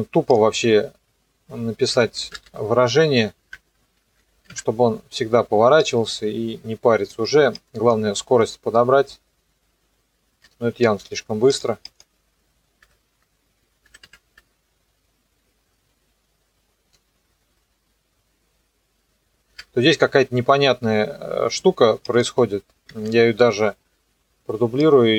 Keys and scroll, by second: 1.7-3.0 typing, 3.5 KP_Multiply, 4.1 KP_2, 4.5 KP_Enter, 8.4 KP_0, 10.4 KP_0, 10.8 space, 12.8 BackSpace, 13.2 Delete, 13.9 KP_3, 14.0 KP_Enter, 14.4 KP_0, 19.5 KP_0, 22.9 ctrl+d.